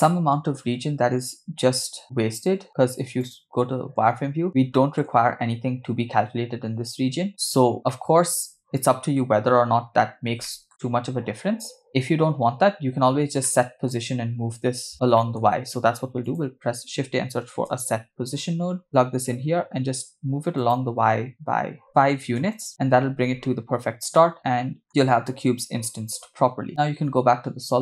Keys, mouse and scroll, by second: 0.1-0.6 shift+middle drag, 0.9-2.2 scroll up 2, 3.3 click, 4.5 scroll up 3, 4.8 shift+middle click, 7.4-7.9 scroll down 5, 8.0-9.2 shift+middle drag, 9.5 scroll up 3, 10.5 shift+middle drag, 12.6-13.4 scroll down 2, 13.5-13.9 shift+middle drag, 14.9 scroll down 1, 15.2 middle click, 15.5 shift+a, 20.6-22.6 drag, 23.3-24.0 scroll down 2, 24.2 shift+middle click, 25.0 scroll up 2.